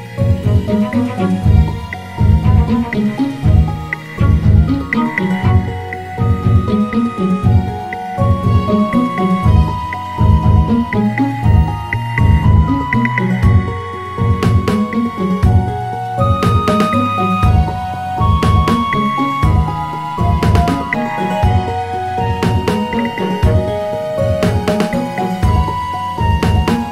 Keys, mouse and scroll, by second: 6.4 Tab, 7.2-10.3 right drag, 12.0 Tab, 13.5 click, 14.6 click, 16.0 alt+shift+click, 17.2 e, 19.0 e, 22.0 click, 24.3 click, 25.6 click.